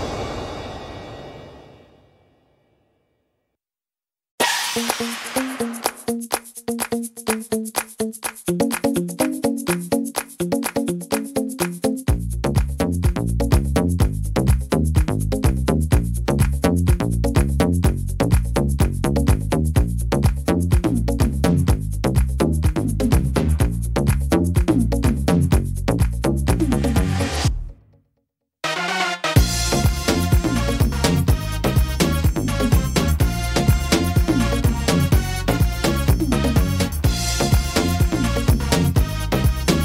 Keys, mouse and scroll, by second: 1.1 click, 2.7 right click, 3.3 e, 5.3 click, 7.2 click, 8.4 middle click, 8.7-10.4 scroll down 7, 9.5 middle click, 10.4 middle click, 10.4 scroll down 1, 11.7 scroll up 2, 12.7 shift+middle click, 13.2 middle click, 14.9 scroll up 2, 16.0 click, 17.9 click, 19.4 right click, 20.4 shift+right click, 21.8 click, 26.7 middle click, 26.9 scroll down 2, 28.1 right click, 29.1 right click, 30.2 click, 31.5 right click, 32.4 click, 35.9 middle click, 36.3 scroll down 2, 37.7 ctrl+z.